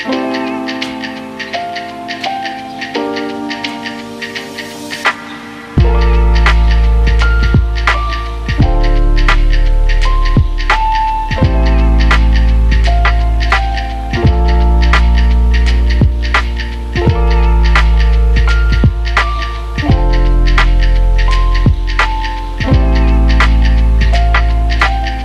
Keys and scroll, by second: 3.4 ctrl+z, 3.6 ctrl+z, 4.1 ctrl+z, 4.6 ctrl+z, 5.8 ctrl+z, 6.1 ctrl+z, 6.9 ctrl+z, 8.8 ctrl+z, 9.6 ctrl+z, 10.0 ctrl+z, 10.8 ctrl+z, 18.3-19.2 typing, 20.6 Return, 22.0 ctrl+Delete.